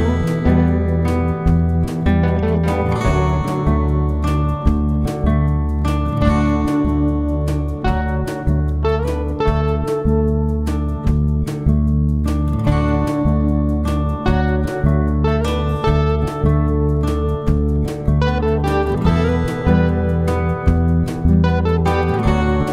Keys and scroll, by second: 0.3 ctrl+d, 2.0 F7, 2.5 F1, 3.4 typing, 5.1 ctrl+d, 5.9 F7, 6.4 F1, 6.7 typing, 9.5 +, 9.9 space, 10.8 Page_Down, 11.2 Page_Up, 13.0 Page_Up, 13.7-14.3 typing, 16.8-17.7 typing, 18.3 ctrl+z, 18.5 ctrl+z, 19.1 typing, 22.0-22.7 typing.